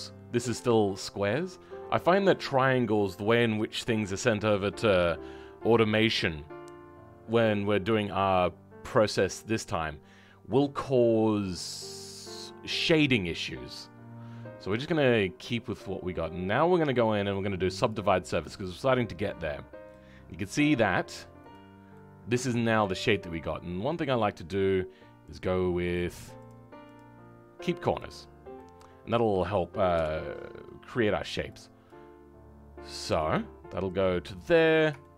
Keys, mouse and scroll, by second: 18.4-19.4 middle drag, 20.3-21.3 middle drag, 21.3 click, 21.9-24.1 middle drag, 24.1-28.5 drag, 28.5 middle click.